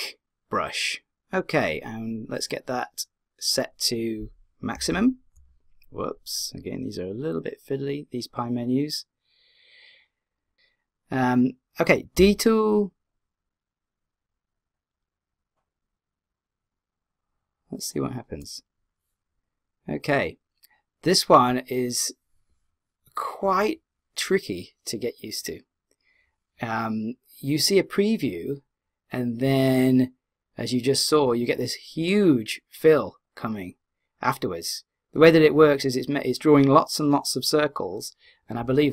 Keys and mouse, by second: 4.7 d, 4.9 w, 12.2 d, 12.7 click, 12.7 d.